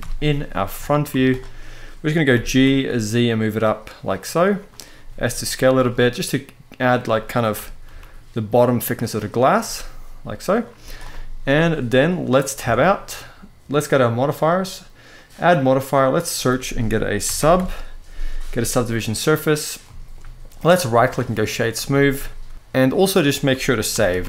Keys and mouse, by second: 0.5 shift+middle drag, 0.8 z, 2.0 g, 2.4 z, 4.3 click, 4.6 s, 5.3 click, 7.3 g, 7.6 z, 8.7 click, 9.3 s, 10.2 click, 10.5 z, 11.2 middle click, 12.3 Tab, 12.8 middle drag, 14.9-18.9 drag, 19.5-19.8 shift+middle drag, 20.3-20.8 right drag, 21.1-21.5 middle drag, 21.6-22.5 shift+middle drag, 23.6 ctrl+s, 23.9 ctrl+s.